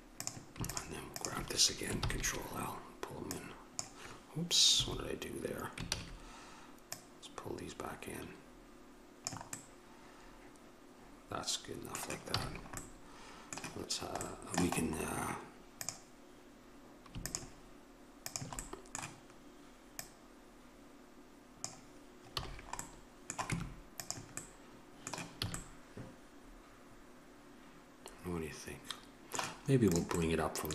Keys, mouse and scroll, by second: 0.4-2.2 drag, 2.2 ctrl+l, 3.7 click, 6.1 ctrl+z, 9.8-12.5 middle drag, 12.5 a, 15.0 middle click, 16.0-19.1 drag, 19.1-21.8 right drag, 22.5 a, 23.7 Tab, 25.6 a, 30.1-30.7 drag.